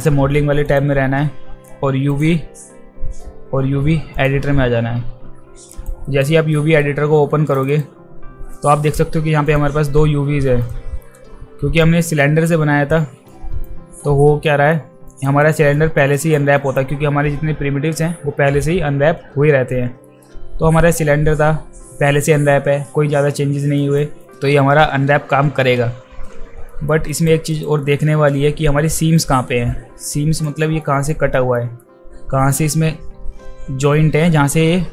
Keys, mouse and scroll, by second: 0.6 click, 2.1 click, 4.2 click, 5.7 alt+right click, 6.0 alt+right click, 6.5 alt+middle click, 7.5 click, 7.7 click, 8.5-9.0 alt+right drag, 9.4 click, 11.8-12.4 drag, 13.3 click, 14.5 alt+middle click, 15.1 alt+click, 15.4 alt+right click, 15.7 alt+middle click, 16.2 alt+right click, 16.6 alt+right click, 20.0 alt+middle click, 23.8 alt+right click, 24.2 alt+right click, 24.3 alt+middle click, 26.7 alt+middle click, 27.1 alt+right click, 27.5 alt+right click, 27.8 alt+middle click, 29.2-30.4 alt+drag, 30.8 alt+middle click, 31.5 alt+middle drag, 34.3 alt+middle click.